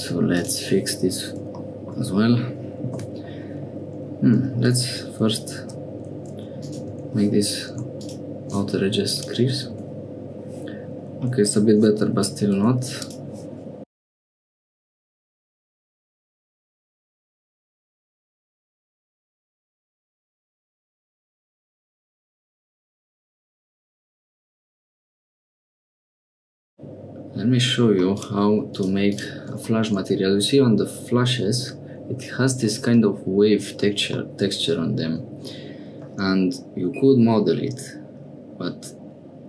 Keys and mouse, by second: 0.3 middle click, 1.7 shift+middle click, 2.9 k, 5.6 2, 9.2-10.3 drag, 12.7 1, 12.9 2, 13.0 click, 13.8 click, 14.5 click, 14.8 click, 17.9 Tab, 18.3 Tab, 18.6 click, 18.9 middle click, 21.0 click, 21.7 Tab, 21.9 middle click, 22.4 middle click, 23.2 Tab, 23.3 3, 23.5 s, 24.5 Tab, 24.7 middle click, 25.5 middle click, 25.8 middle click, 26.2-27.8 middle drag, 28.1 click, 28.7 click, 29.0 click, 34.2-36.4 drag.